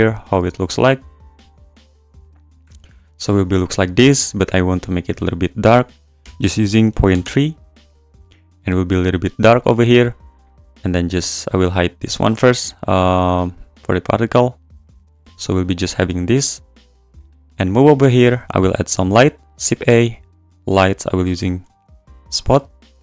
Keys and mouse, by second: 2.6 t, 5.3-7.3 drag, 9.6 click, 13.9 click, 15.0 click, 17.0 `, 17.5 `, 19.1 shift+a, 21.6 g, 21.7 z.